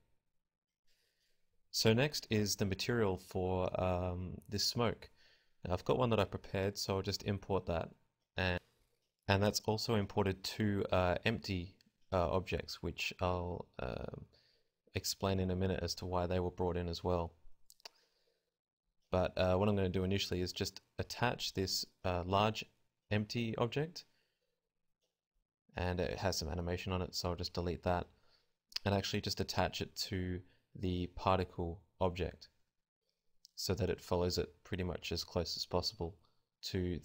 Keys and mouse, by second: 0.1 KP_0, 1.5 click, 2.5 click, 5.6 click, 10.6 right click, 11.1-13.6 typing, 15.6 ctrl+p, 16.6 a, 18.1 ctrl+z, 18.2 ctrl+z, 18.4 ctrl+z, 19.0 alt+p, 20.8 ctrl+p, 21.4 a, 23.3 g, 25.8-26.3 typing, 28.4 g, 29.2 g, 33.7 KP_0, 34.7 z, 36.3 z, 36.8 z.